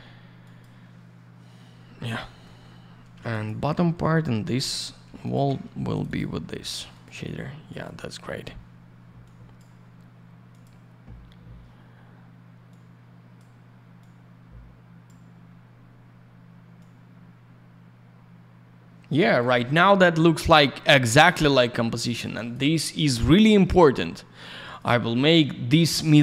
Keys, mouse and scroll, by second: 0.4 click, 0.5 click, 2.1 middle click, 3.1 й, 3.3 click, 3.7 middle click, 4.1 alt+middle click, 4.5 middle click, 5.2 ctrl+click, 5.9 click, 6.0 click, 6.0 click, 6.1 click, 6.9 click, 7.0 click, 7.6 click, 7.8 click, 9.2 click, 10.5 click, 10.6 click, 12.6 click, 13.9 click, 16.7 click, 21.0 click, 21.1 click, 21.4 middle click, 22.2 click, 22.3 click, 22.3 click, 22.5 double click, 24.7 click, 24.7 click.